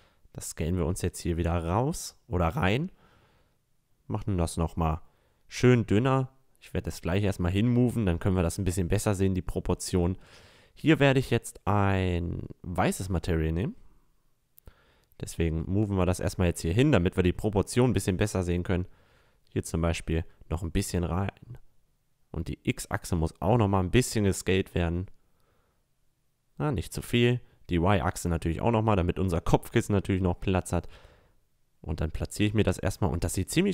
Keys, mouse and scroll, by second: 1.7-2.4 drag, 2.8 s, 3.4 drag, 4.7 s, 7.2 s, 12.1-17.4 drag, 17.2 s, 19.8-23.4 drag, 22.8 s, 26.8 s, 30.0 click, 31.3-31.7 drag, 31.9 click.